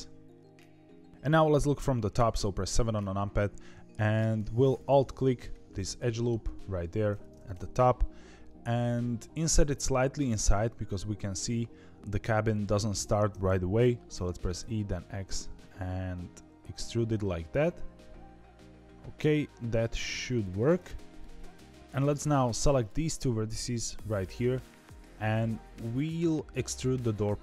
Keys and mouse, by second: 2.1 KP_7, 4.7 alt+click, 5.8 middle click, 7.5 KP_7, 14.1 e, 22.7 click.